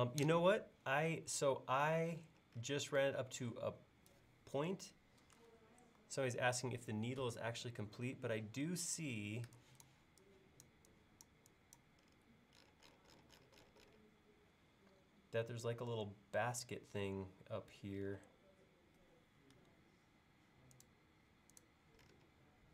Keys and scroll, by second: 7.3 super+Tab.